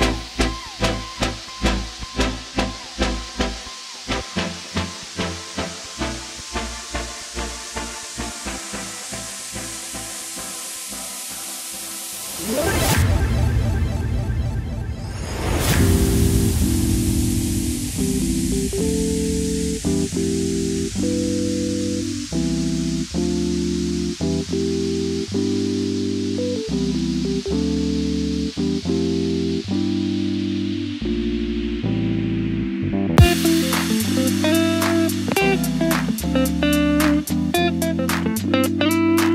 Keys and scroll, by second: 19.5-21.4 typing, 22.0 ctrl+c, 22.1 ctrl+v, 24.8 Down, 24.8 Right, 24.8 -, 25.8 ctrl+z, 26.9 shift+Down, 27.2 Right, 27.4 Right, 27.4 Right, 35.3 ctrl+c, 35.5 ctrl+v, 36.0 shift+Right, 36.4 shift+Right, 36.5 shift+Right, 36.7 shift+Right, 36.8 shift+Right.